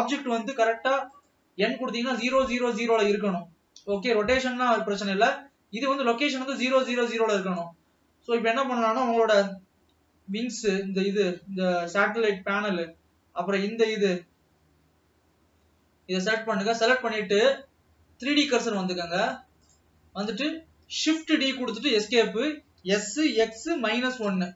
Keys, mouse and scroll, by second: 0.0 n, 7.7 Tab, 8.0 scroll up 1, 9.3 l, 9.8-10.7 scroll up 3, 10.7 middle click, 11.3-12.6 scroll up 3, 12.6-15.3 typing, 15.7-16.1 scroll down 2, 16.3 middle click, 17.0-17.5 scroll down 5, 19.8 click, 20.2 scroll down 2, 21.2 shift+d, 23.0 s.